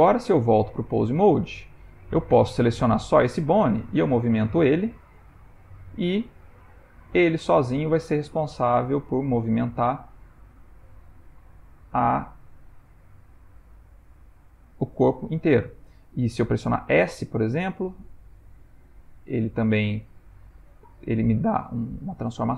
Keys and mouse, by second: 1.4 click, 2.4 g, 16.7 s.